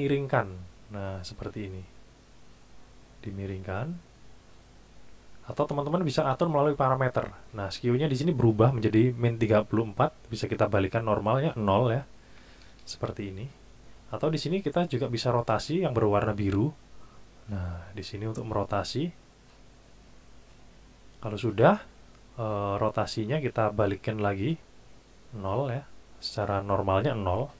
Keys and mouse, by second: 0.5 click, 2.2 click, 4.2 click, 5.5 click, 10.4 click, 11.0 click, 12.3 KP_0, 12.6 KP_Enter, 17.1 click, 19.0 click, 20.4 click, 24.7 click, 25.8 click, 26.6 click.